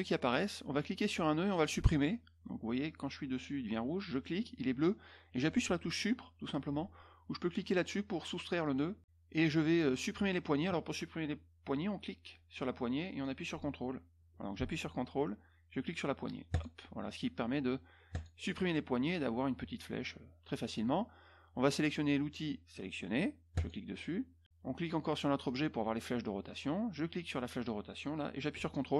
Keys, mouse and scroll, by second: 0.7 click, 4.1 click, 8.6 click, 10.1-13.2 drag, 16.5 ctrl+click, 18.1 ctrl+click, 23.5 click, 25.4 click, 27.1-28.9 drag.